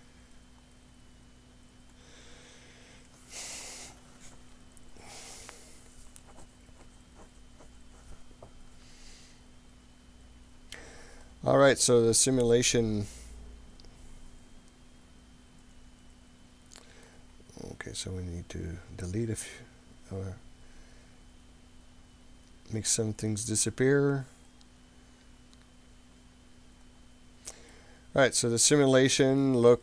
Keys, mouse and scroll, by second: 0.3-0.7 scroll up 4, 2.0 click, 10.7 scroll up 3, 11.3-17.1 middle drag, 18.4-19.4 scroll down 3, 22.8 click, 23.2 click, 23.7 click, 24.6 click, 26.1 click, 26.9 click, 27.7-28.9 middle drag.